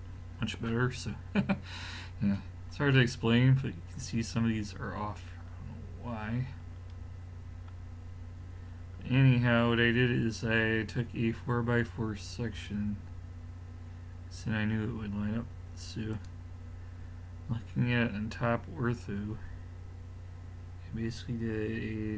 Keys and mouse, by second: 2.9 middle click, 4.8-7.5 middle drag, 11.2 middle click, 12.0-15.4 drag, 16.2-20.8 drag.